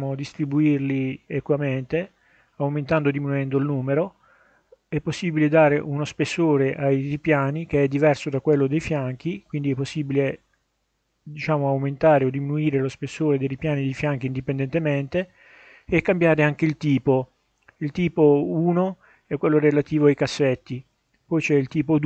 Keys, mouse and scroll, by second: 2.0-4.4 drag, 6.2-10.5 drag, 15.2 click, 16.7-18.2 middle drag, 20.5 click, 21.2 click, 21.7 click.